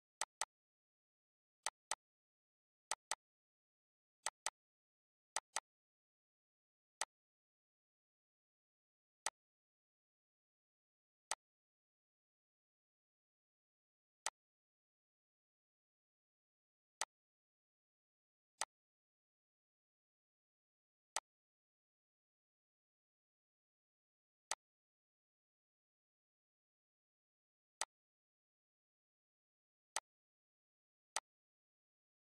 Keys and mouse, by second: 1.3 click, 5.9 click, 10.3 click, 13.4 click, 14.4 Delete, 15.9 click, 17.1 click, 19.9 click, 20.9 click, 21.9 click, 22.9 click, 23.9 click, 29.9 click.